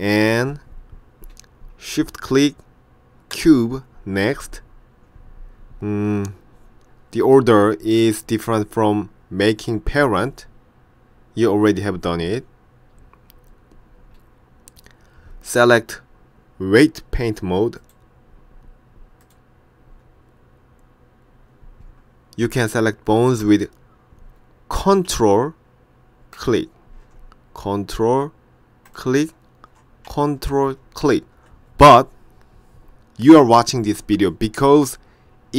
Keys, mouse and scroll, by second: 3.4 shift+click, 17.8 click, 26.4 ctrl+click, 29.0 ctrl+click, 31.1 ctrl+click.